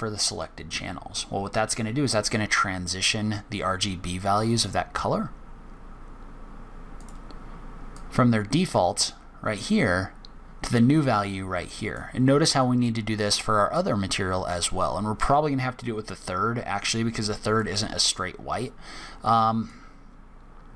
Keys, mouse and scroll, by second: 0.4 click, 4.5 click, 7.0 click, 7.9 click, 16.0 click, 19.6 click.